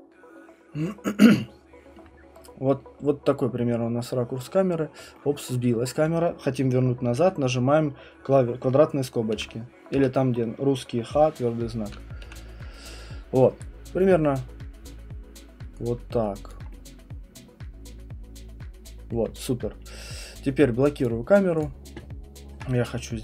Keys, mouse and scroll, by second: 2.0 alt+middle click, 2.1 middle click, 9.3 [, 9.9 ], 11.8 [, 12.2 [, 16.5 alt+click, 19.1 alt+middle click, 21.0 click.